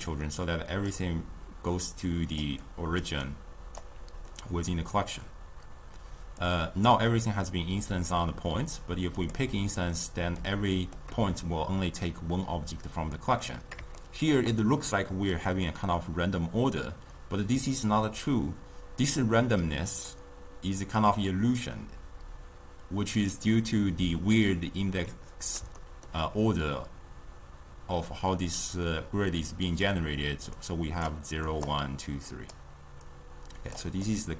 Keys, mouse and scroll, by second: 0.3-1.9 middle drag, 1.9-3.9 typing, 2.1 click, 2.7 click, 3.3 right click, 4.4-6.5 middle drag, 6.5-9.3 drag, 10.1-18.0 middle drag, 25.1-30.5 middle drag, 30.5-34.1 typing, 30.6 click, 31.1 click, 31.6 click, 32.2 click, 33.2 click, 34.1-34.3 right drag.